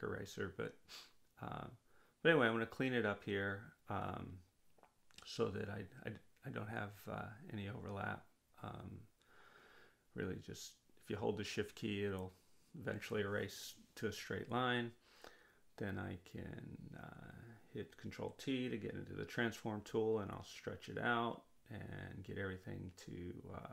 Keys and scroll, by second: 6.8 ctrl+z, 19.4 ctrl+t.